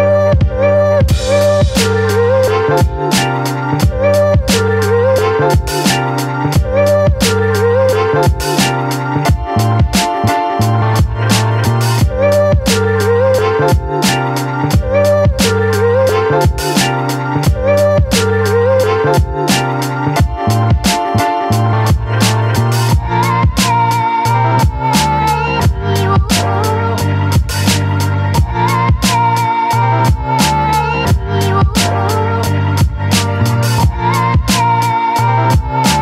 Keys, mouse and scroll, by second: 4.7-7.0 alt+drag, 7.0 space, 7.4-10.4 ctrl+drag, 10.4 Right, 12.1 Left, 13.1 space, 13.4 alt+click, 14.4 ctrl+t, 15.7-18.5 shift+drag, 19.9 space, 20.0 click, 20.4 space, 21.5 click, 21.9-23.5 alt+drag, 23.5 space, 23.8-29.0 ctrl+drag, 29.0 Right, 30.7 ctrl+t, 31.9-33.3 shift+drag, 33.3-34.8 shift+drag, 35.1 space, 35.4 alt+click.